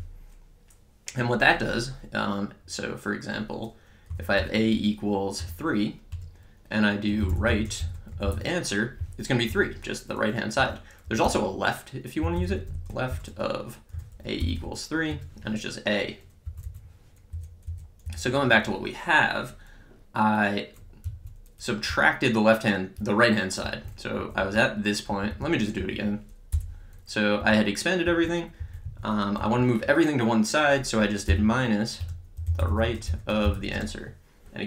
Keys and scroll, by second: 4.1 a, 4.4 =, 5.4 3, 6.1 Return, 6.8-8.9 typing, 9.5 Return, 10.7 Up, 11.1 Down, 12.0-15.1 typing, 16.5 Up, 17.4 BackSpace, 21.1 Right, 21.9 Left, 23.6 Down, 24.2 Up, 25.1 Down, 25.8 Up, 26.6 BackSpace, 27.4 Down, 28.6 Up, 28.9 Right, 29.4 Down, 31.3-34.1 typing, 32.0 Return.